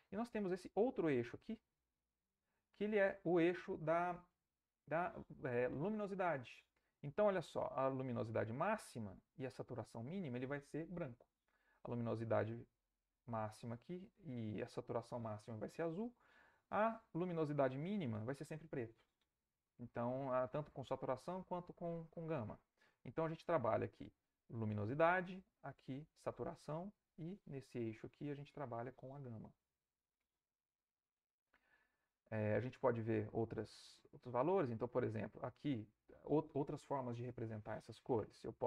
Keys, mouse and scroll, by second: 1.1-27.0 drag, 27.3-31.5 drag, 32.9 click.